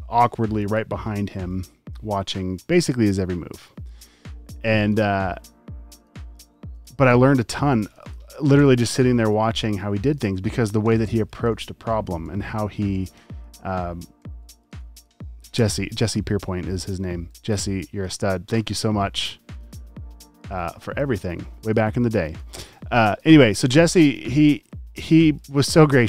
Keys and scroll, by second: 1.4 super+f, 1.9 v, 3.4 space, 3.9 space, 4.7 space, 5.8 space, 6.3 alt+super+space, 6.9 alt+super+space, 7.5 v, 7.7 space, 8.2 alt+super+space, 10.9 t, 12.3 typing, 14.2-15.7 typing, 17.1 space, 17.7 super+space, 18.3 space, 18.4 space, 18.7 v, 20.9 space, 21.4 space, 22.0 super+space.